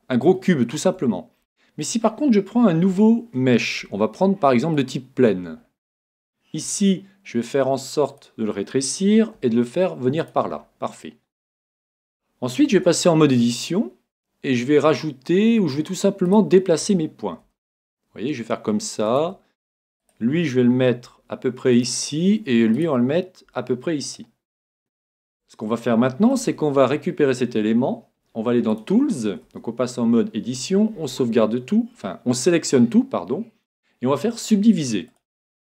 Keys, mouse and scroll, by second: 0.6-3.4 middle drag, 5.7-7.7 middle drag, 6.6 s, 8.2-10.0 drag, 9.2 g, 10.4-12.1 drag, 10.6-13.2 middle drag, 12.7 Tab, 13.2 scroll up 1, 13.5-15.3 middle drag, 16.2 right click, 17.4 g, 19.2-21.1 drag, 20.0 right click, 21.1 g, 21.8-23.8 drag, 22.5 g, 22.8 right click, 23.5 g, 24.1 click, 24.8-26.8 middle drag, 26.4 Tab, 28.7-30.5 drag, 29.4 Tab, 30.6 a, 30.9 a, 34.4-35.6 drag.